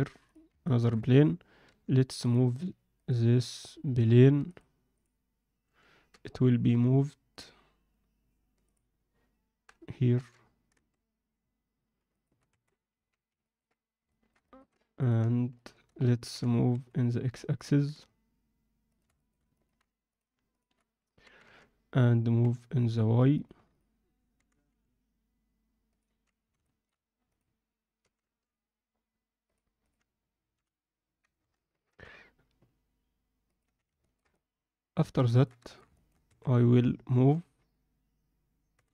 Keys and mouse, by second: 0.6 ctrl+alt+middle click, 1.7 g, 2.2 click, 2.7 g, 3.0 click, 4.4-5.4 drag, 6.1 m, 8.6 click, 10.1 g, 12.5 Tab, 12.9 z, 13.4 ctrl+alt+middle click, 14.1 alt+shift+middle click, 14.4 ctrl+alt+middle click, 15.0 click, 15.5 shift+click, 16.3 g, 19.1 alt+shift+middle click, 19.5 ctrl+alt+middle click, 20.1 click, 21.2 g, 26.6 alt+shift+middle click, 27.3 click, 29.8 click, 30.5 h, 31.4 ctrl+z, 31.7 g, 33.6 z, 34.0 ctrl+middle click, 34.3 middle click, 35.3 ctrl+alt+middle click, 35.6 alt+shift+middle click, 35.9 ctrl+alt+middle click, 36.2 a, 38.7 g.